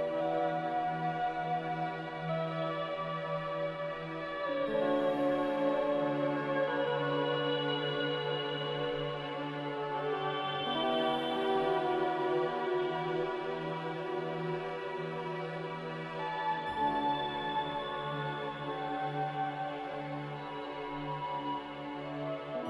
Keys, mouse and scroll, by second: 5.2 m, 15.1 g, 17.4 Escape, 19.5 Escape, 20.9 typing, 21.8 ctrl+c, 22.0 ctrl+v.